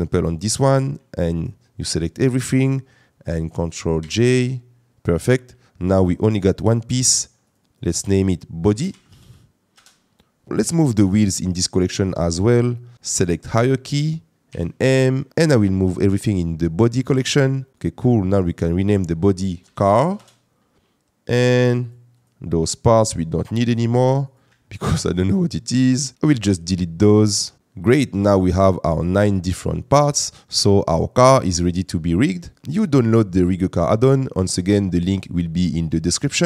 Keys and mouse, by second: 0.2 click, 1.4 shift+click, 4.1 ctrl+j, 7.1 click, 7.6-9.7 drag, 12.0 click, 12.9 right click, 14.5 m, 18.2 click, 18.4-20.1 drag, 21.8 click, 22.2 click, 23.5 shift+click, 24.2 click, 24.7 shift+click, 26.1 Delete.